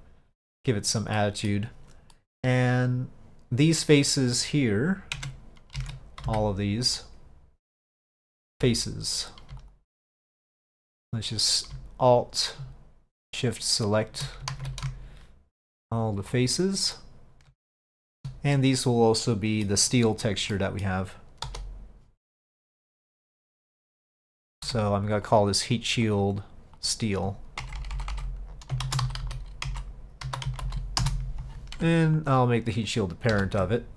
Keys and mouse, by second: 1.3 middle drag, 2.2 middle drag, 5.2 Tab, 5.9 alt+a, 6.3 c, 9.7 alt+click, 10.7 middle click, 13.4 alt+shift+click, 14.6 ctrl+z, 15.7 click, 16.3 click, 17.0 click, 17.9 shift+click, 18.6-19.7 middle drag, 20.6 middle click, 23.2 middle click, 24.7 Tab, 25.3 click, 25.8-31.8 drag, 27.8 BackSpace, 29.3 t, 32.3 ctrl+click, 33.4 ctrl+p.